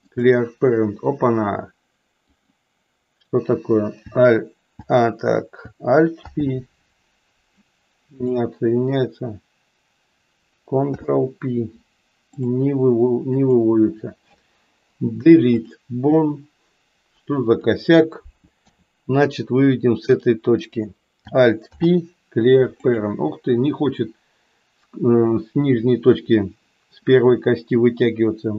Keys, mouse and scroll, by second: 2.3 click, 6.2 alt+p, 10.8 ctrl+p, 14.8 Delete, 17.6 click, 18.7 e, 20.5 click, 21.6 alt+p.